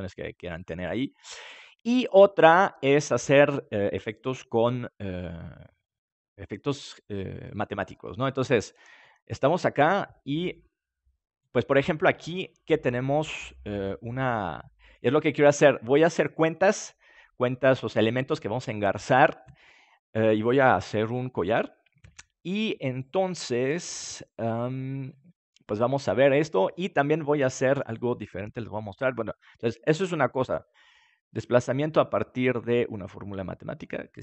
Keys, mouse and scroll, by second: 13.1-14.8 middle drag.